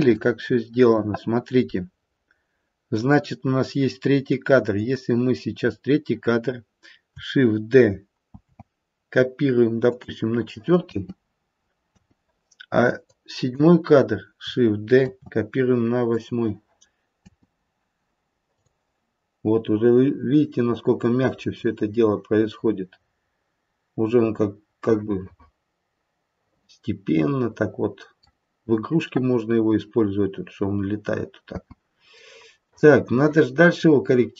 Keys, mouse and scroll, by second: 3.1 click, 4.1 click, 8.3 shift+d, 10.7 space, 11.8 space, 12.9 click, 16.1 shift+d, 17.3 space, 18.6 click, 19.1-21.5 scroll down 2, 24.1-25.0 scroll down 1, 25.0 middle click, 31.5 space, 32.2 middle click.